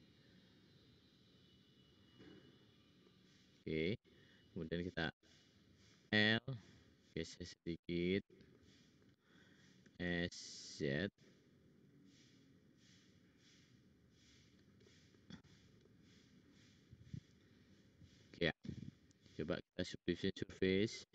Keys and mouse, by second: 2.1 middle click, 4.9 k, 5.9 l, 6.6 click, 8.5 middle click, 9.8 s, 11.1 middle click, 15.4-16.5 drag, 19.9-21.1 middle drag.